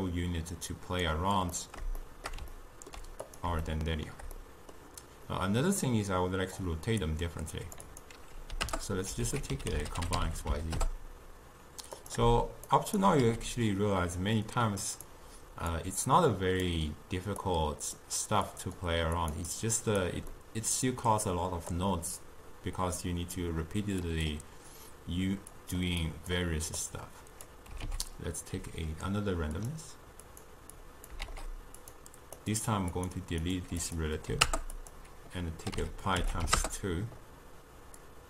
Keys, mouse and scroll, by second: 1.6-3.3 middle drag, 3.3 click, 3.7-6.7 shift+middle drag, 6.7-9.2 drag, 9.2 ctrl+a, 12.7-13.2 shift+right drag, 13.2 g, 15.7 click, 17.4-18.6 drag, 19.2 click, 19.5-20.4 drag, 20.4-21.7 middle drag, 21.7 click, 24.1 click, 25.6 click, 26.0-26.9 drag, 27.9 ctrl+a, 30.3 click, 30.7 click, 31.2 shift+d, 32.4 click, 33.0 click, 33.8-37.8 drag, 38.0-38.2 drag.